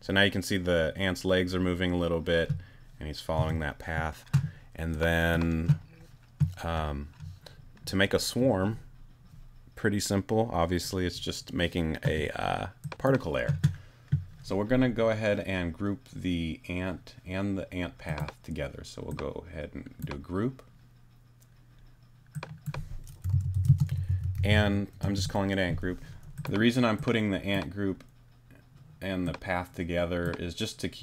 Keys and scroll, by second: 3.4 space, 23.0-25.0 typing, 25.0 Return.